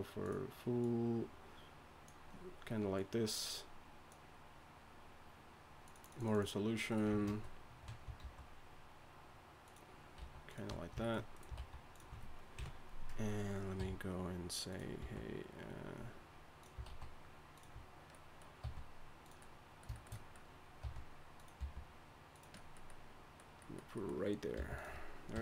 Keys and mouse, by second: 7.3 ctrl+a, 8.2 alt+s, 10.2 alt+s, 11.6 alt+s, 12.5 KP_1, 13.8 r, 15.0 s, 16.8 alt+s, 18.6 r, 20.8 r, 21.6 g, 24.6 g, 25.3 KP_3.